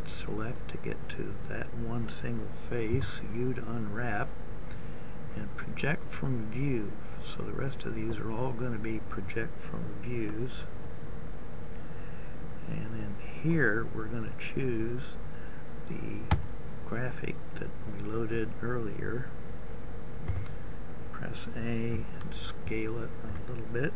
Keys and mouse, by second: 0.6-2.8 drag, 2.8 u, 20.9 a.